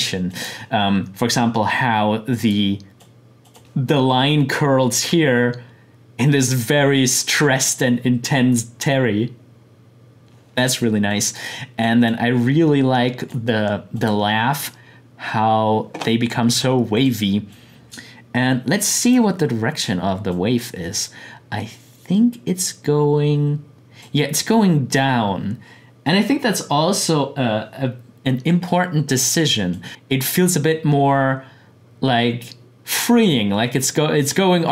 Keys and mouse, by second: 7.0 click, 11.1-13.9 drag, 16.9-26.4 drag, 29.7-32.6 drag.